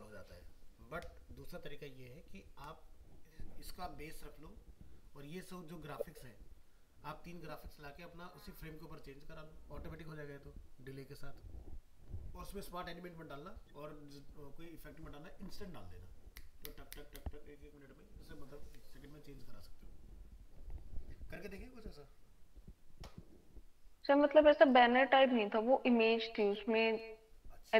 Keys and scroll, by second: 26.4 alt+Tab.